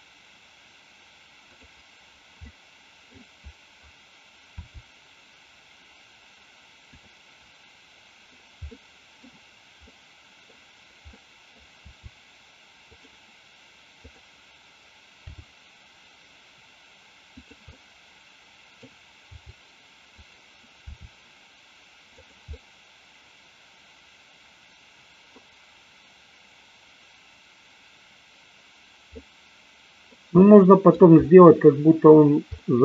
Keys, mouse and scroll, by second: 1.6 click, 2.3 scroll up 1, 2.4 middle click, 4.6 r, 6.9 drag, 8.7 middle click, 9.8 middle click, 11.1 middle click, 11.8 r, 12.9 click, 14.1 click, 15.2 g, 17.3 click, 17.8 scroll up 1, 17.9 middle click, 19.3 g, 20.2 click, 20.8 r, 22.2 click, 22.6-25.3 middle drag, 29.2-30.2 middle drag, 30.4-30.9 middle drag, 32.6-32.8 shift+middle drag.